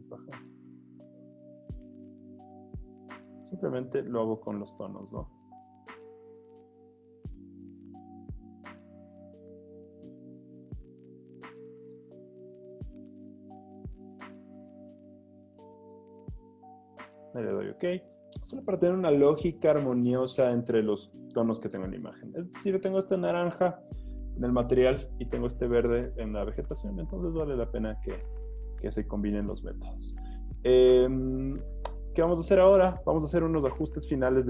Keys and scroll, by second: 16.5 z.